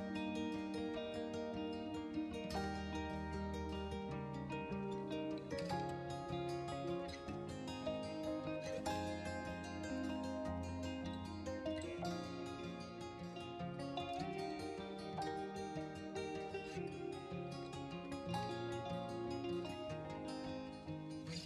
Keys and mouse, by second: 0.7 shift+k, 1.7 a, 2.0 a, 2.4 b, 5.2 right click, 7.8 shift+k, 8.7 a, 8.9 a, 9.2 b, 12.0 click, 14.7 shift+k, 15.2 a, 15.4 a, 16.3 b.